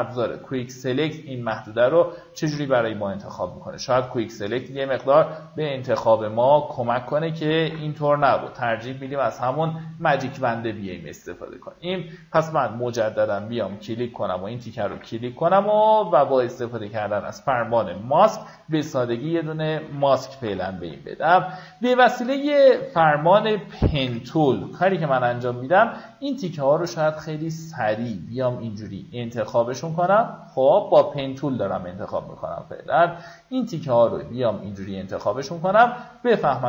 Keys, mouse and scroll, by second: 0.0 click, 1.4 alt+right click, 2.3 click, 3.4 alt+right click, 4.3-6.9 drag, 8.0 ctrl+d, 9.0-9.4 typing, 10.6 right click, 11.3 click, 12.0-12.6 alt+scroll up 1, 12.6 click, 14.0 ctrl+d, 14.3 click, 15.3 typing, 17.2-19.1 alt+scroll down 1, 19.1 q, 21.4 alt+scroll up 1, 22.0 alt+scroll up 1, 22.5 click, 23.8 typing, 26.2-36.6 drag.